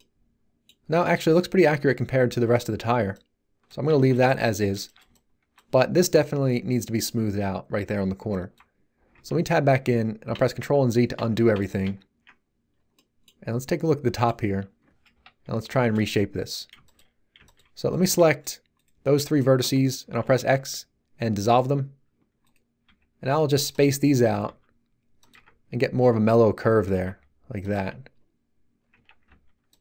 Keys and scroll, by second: 9.1 Tab, 10.3 ctrl+z, 15.1 1, 20.2 x, 22.8 g, 25.3 Tab, 27.0 g, 27.7 Tab, 29.2 g.